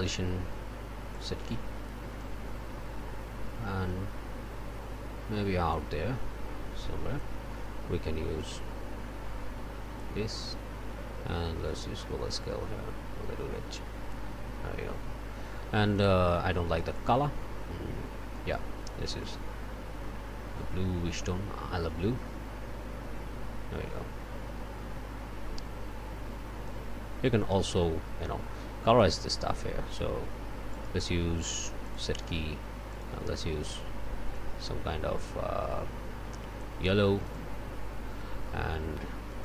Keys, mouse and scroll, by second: 1.1 click, 8.4-10.2 drag, 11.7-14.3 drag, 16.0 click, 17.0-18.7 drag, 20.6-26.9 drag, 28.9 click, 29.2-30.7 middle drag, 30.7 right click, 31.9 click, 32.9 click, 36.3 click, 37.3 click, 39.3 click.